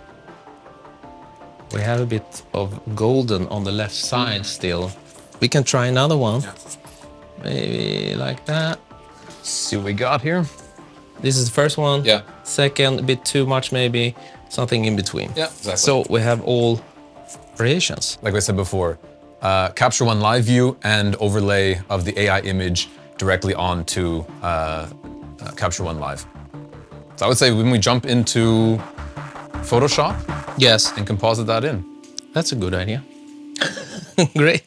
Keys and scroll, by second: 1.4 super+k, 8.2 super+k, 11.9 Right, 13.8 Right.